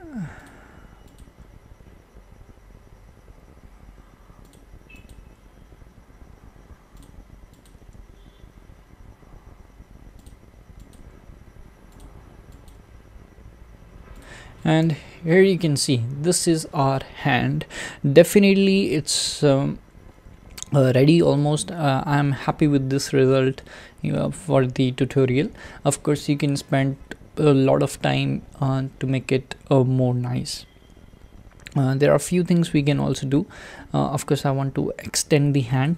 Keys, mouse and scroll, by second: 1.2 click, 1.3 g, 5.1 click, 5.2 g, 7.7 click, 7.8 g, 10.9 click, 11.0 g, 12.7 click, 12.7 g, 14.7 click, 15.1 alt+z, 22.1 alt+z, 29.7 scroll down 2, 33.8-34.6 shift+middle drag, 34.6-35.8 scroll down 1, 35.8 click.